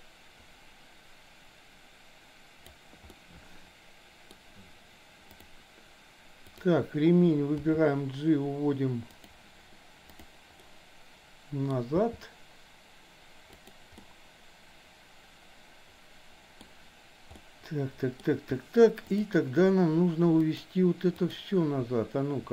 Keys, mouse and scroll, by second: 3.1-4.3 middle drag, 5.3 click, 6.6 click, 7.6 g, 10.1 click, 10.7-11.7 middle drag, 12.0 g, 14.0-16.7 middle drag, 17.5 middle click, 20.5 click, 21.2 click.